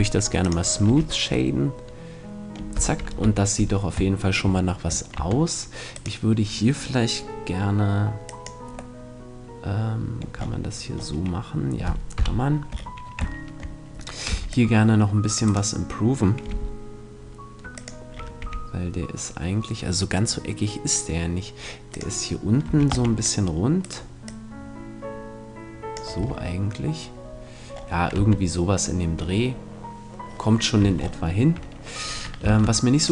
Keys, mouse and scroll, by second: 0.4-2.3 drag, 0.8 t, 3.1 KP_1, 5.2 Tab, 5.9-7.7 right drag, 8.2-10.0 drag, 9.0-12.2 middle drag, 12.2 KP_1, 12.7 middle click, 13.4-15.1 middle drag, 14.3 c, 15.5-17.4 right drag, 16.5 g, 17.8-19.7 drag, 18.4 r, 22.0-23.8 drag, 22.6 a, 23.0 c, 23.9-25.8 right drag, 24.2-25.6 drag, 25.8 click, 26.2 a, 27.7-29.4 middle drag, 28.2 Tab, 30.8 Tab, 32.5 ctrl+Tab.